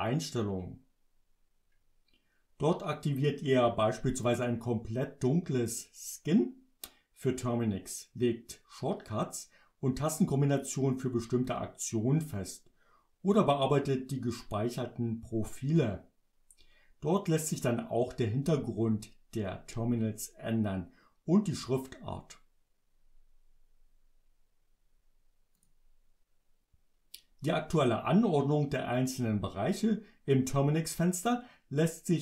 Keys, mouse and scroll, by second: 25.6 click.